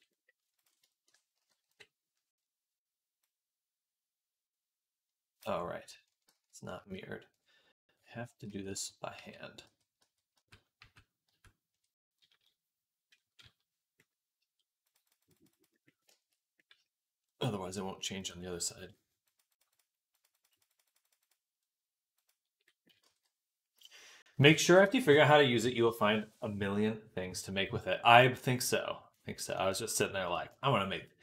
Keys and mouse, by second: 0.0-31.2 drag.